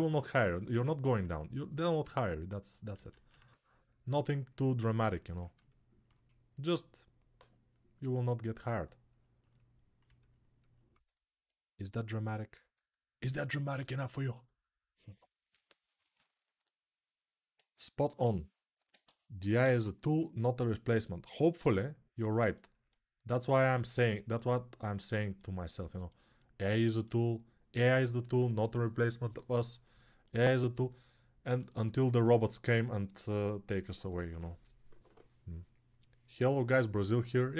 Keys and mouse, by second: 2.7 ctrl+z, 2.7-27.7 right drag, 2.9 ctrl+z, 27.7-37.5 drag.